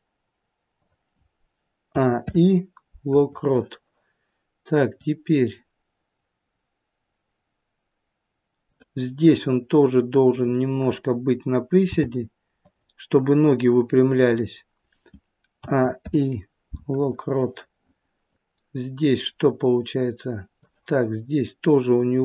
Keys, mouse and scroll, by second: 1.8 a, 2.1 i, 10.2 click, 11.7 g, 15.5 a, 15.9 i, 18.3 click, 22.0 click.